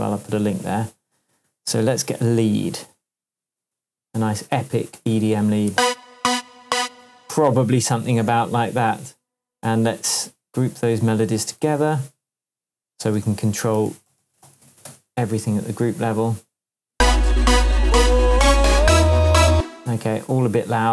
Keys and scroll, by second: 5.7 space, 7.0 space, 11.6 shift+super+g, 12.1 super+g, 13.1 super+r, 13.5-14.9 typing, 15.6 Return, 16.9 space, 19.5 space.